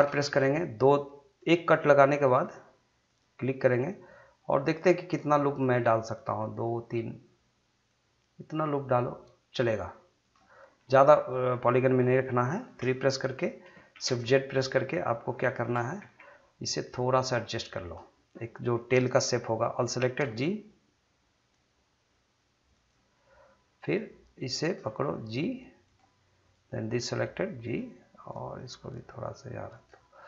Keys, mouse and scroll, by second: 0.0 ctrl+r, 1.4-10.2 drag, 10.8 middle click, 11.4 scroll down 1, 11.7 middle click, 13.9 shift+z, 14.5-15.0 scroll up 2, 15.0 shift+middle click, 16.0 1, 16.9-20.2 drag, 20.2 g, 22.7 click, 23.1 click, 24.8 g, 25.8 click, 27.0 g, 27.6 click, 28.6 g, 29.7 click.